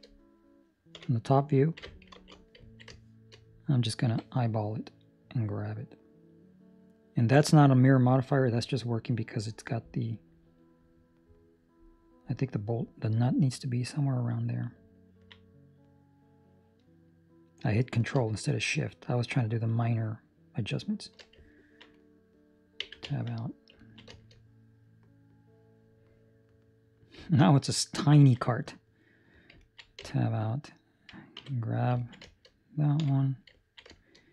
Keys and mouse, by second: 0.9 KP_7, 1.6 ctrl+middle click, 2.1 ctrl+space, 2.6 ctrl+middle click, 2.8 shift+middle click, 4.0 g, 21.4 ctrl+middle click, 21.9 middle click, 22.8 Tab, 23.1 ctrl+middle click, 23.3 middle click, 23.8 ctrl+middle click, 24.0 shift+middle click, 25.1 middle click, 27.2 ctrl+middle click, 27.4 middle click, 28.2 ctrl+middle click, 29.0 right click, 29.5 ctrl+middle click, 29.9 Tab, 31.3 3, 31.4 right click, 32.0 ctrl+middle click, 32.2 shift+middle click, 32.9 KP_7, 33.5 ctrl+middle click, 33.9 shift+middle click.